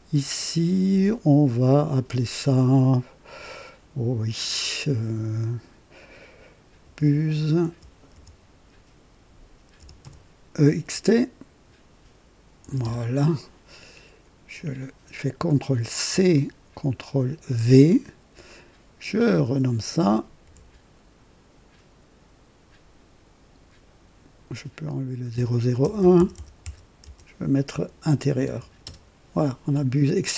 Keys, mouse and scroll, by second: 6.5-10.4 typing, 12.5 typing, 12.9 Return, 16.0 ctrl+c, 17.4 ctrl+v, 17.8 typing, 19.1 click, 20.3-21.0 typing, 24.7 click, 25.8-29.2 typing.